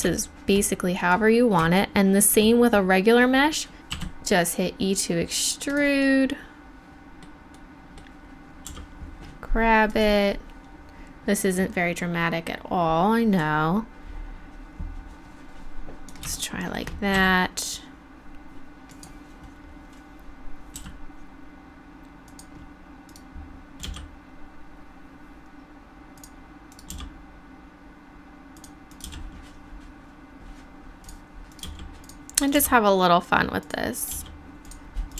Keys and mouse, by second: 0.2-1.8 middle drag, 3.8 middle click, 3.9 e, 5.7-7.6 drag, 8.7 g, 11.0-13.4 drag, 17.1 e, 18.9 click, 19.4-22.4 drag, 20.8 e, 23.8 g, 24.9-26.2 middle drag, 26.2-28.3 drag, 26.9 g, 28.5 middle click, 28.6 click, 29.0 g, 30.6 middle click, 31.6 g, 32.5 g, 34.1 g.